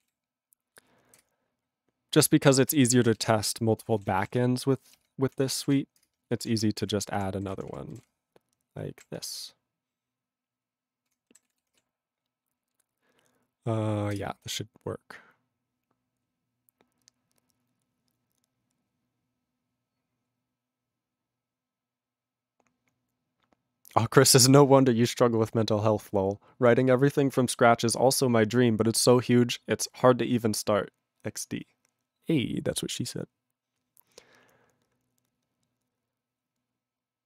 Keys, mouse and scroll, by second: 2.8 ctrl+g, 3.8 ctrl+g, 6.4 alt+>, 6.8 ctrl+p, 6.9 ctrl+p, 7.4 ctrl+n, 7.5 ctrl+p, 7.7 ctrl+p, 7.9 ctrl+n, 8.0 ctrl+space, 8.0-9.0 ctrl+p, 11.1 ctrl+g, 11.4 ctrl+s.